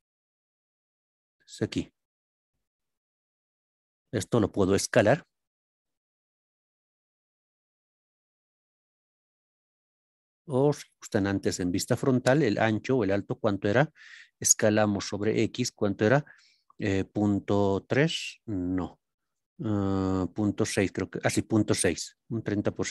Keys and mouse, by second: 0.2-1.8 shift+middle drag, 11.4 KP_1, 16.9 KP_Decimal, 17.8 KP_3, 19.4 BackSpace, 20.6 KP_6.